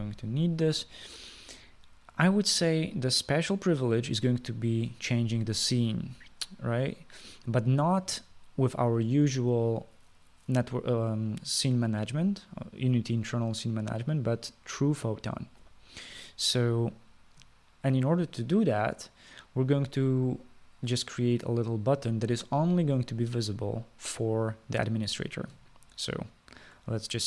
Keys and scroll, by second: 0.7 BackSpace.